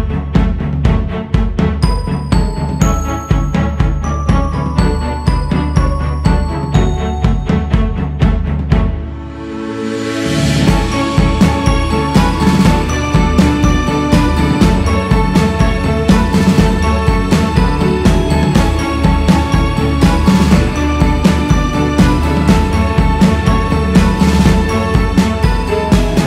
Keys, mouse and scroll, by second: 0.6-4.4 drag, 4.4 f, 6.0-18.0 drag, 18.4-23.6 drag, 23.6-24.3 scroll down 5, 25.3 click.